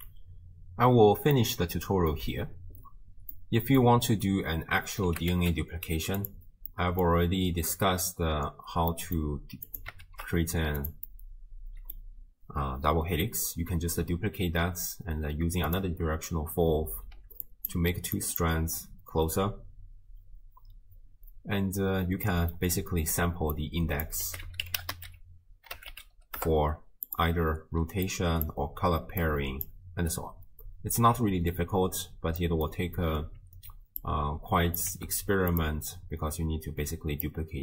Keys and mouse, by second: 1.4 click, 3.5 click, 3.7 middle click, 5.1 g, 6.7 middle click, 8.9 middle click, 9.7 click, 10.1 ctrl+shift+d, 11.1-12.1 middle drag, 15.7 click, 17.1-18.8 d, 17.5 click, 18.2 click, 22.3 middle click, 23.6-27.2 drag, 27.8-29.1 d, 28.1 click, 29.2 click, 29.2-30.2 d, 30.2-31.8 drag, 31.0 d, 31.8 d, 32.4 middle click, 34.0-34.8 drag, 34.9 g, 37.3-37.6 drag.